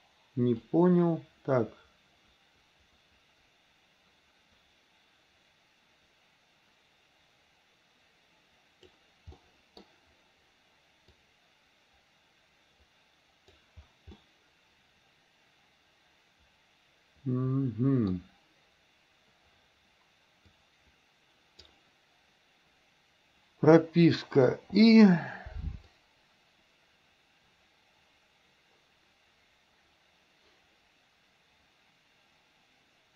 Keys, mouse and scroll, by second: 0.7-9.0 drag, 9.4-9.9 middle drag, 11.2-13.6 drag, 14.2-18.2 middle drag, 20.5 click, 20.9 click, 24.6 i, 26.0-33.1 drag.